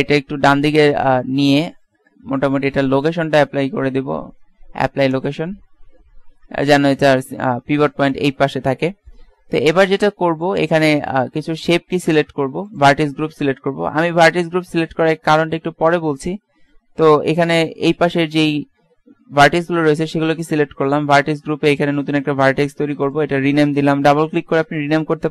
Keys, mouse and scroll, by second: 0.3-2.0 drag, 3.7 ctrl+a, 6.3-8.6 middle drag, 11.3 Tab, 11.7 middle click, 12.0 click, 12.8 click, 13.4 a, 13.9 a, 14.3 a, 17.6 b, 22.1-25.3 drag.